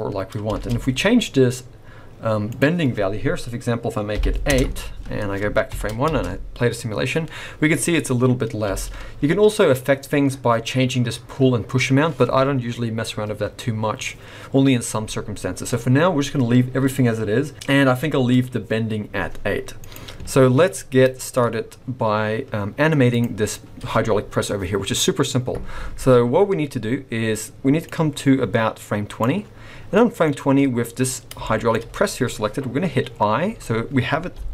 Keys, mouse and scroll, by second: 0.5 space, 2.5 click, 5.7 shift+Left, 6.0 space, 8.7 space, 10.0-11.6 scroll up 1, 11.6-13.2 scroll up 1, 17.5 click, 20.5 scroll down 1, 20.6 middle click, 23.1 click, 26.3-26.8 scroll down 2, 26.8 scroll up 2, 27.9 click, 29.9 middle click, 31.4 shift+middle click, 34.3 g.